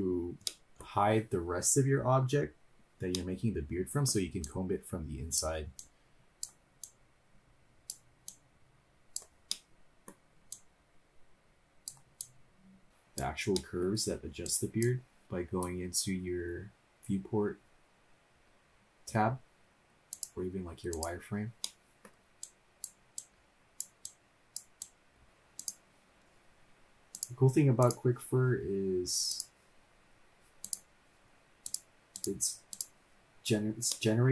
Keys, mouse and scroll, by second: 0.5-0.8 middle drag, 3.1 middle click, 4.4-5.4 drag, 5.8 click, 6.8-7.9 drag, 8.3-9.2 drag, 9.5-10.1 middle drag, 10.6-11.9 drag, 12.2-13.2 drag, 12.9 middle click, 12.9 scroll down 2, 13.5-14.2 middle drag, 14.5 click, 20.2 click, 20.9 click, 21.6 middle click, 22.5-23.9 drag, 24.4 click, 24.8-25.2 drag, 25.2-25.6 scroll up 2, 25.6 click, 27.2 click, 27.9-29.4 drag, 30.6 click, 31.6 click, 32.1-32.8 drag, 33.9 middle click.